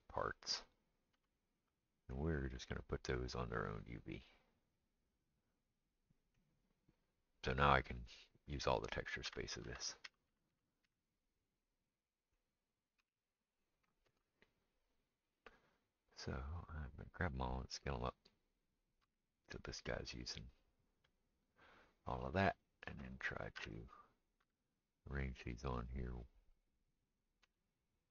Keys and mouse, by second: 0.6 l, 1.1 l, 2.5 l, 8.6 click, 9.3-10.8 typing, 13.0 g, 14.1 ctrl+space, 16.5-18.7 drag, 17.7 s, 18.7-28.1 middle drag, 19.0 g, 23.1 click, 23.6 l, 24.4 g, 26.6 click, 27.4 j.